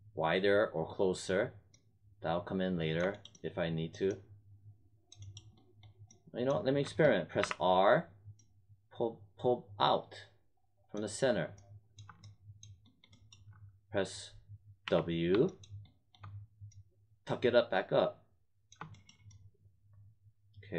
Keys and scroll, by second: 7.3 r, 14.8 w.